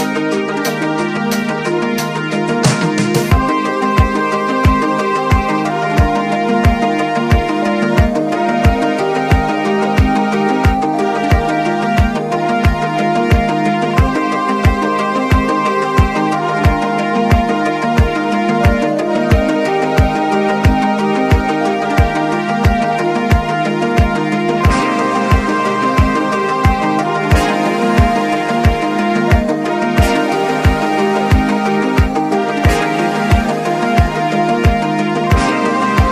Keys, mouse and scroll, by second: 0.0 alt+scroll down 1, 0.8 click, 2.1 alt+scroll down 1, 2.6 scroll up 2, 4.7 click, 6.1-7.8 drag, 7.8 scroll down 1, 10.2-10.6 scroll, 13.6-16.3 scroll up 1, 18.8-21.5 scroll up 1, 22.6-23.0 scroll down 1, 29.3 click, 30.7-34.2 drag.